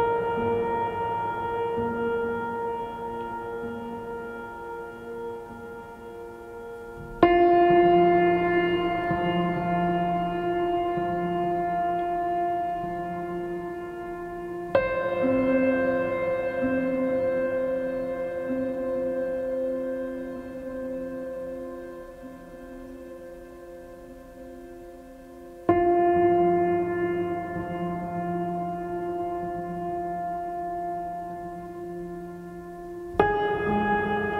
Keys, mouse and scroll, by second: 7.3 right click, 8.4 right click, 9.9 right click, 11.4 right click, 12.0 right click, 12.5 right click, 17.3 right click, 18.0 right click, 18.4 right click, 18.7 right click, 20.3 right click, 21.9 right click.